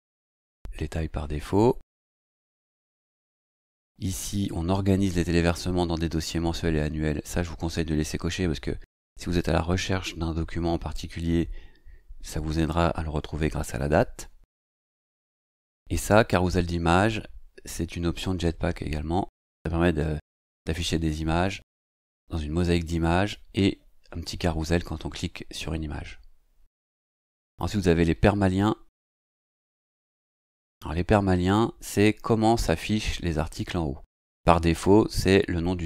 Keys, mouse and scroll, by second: 1.7-15.1 scroll down 2, 15.1 scroll down 1, 27.5 click.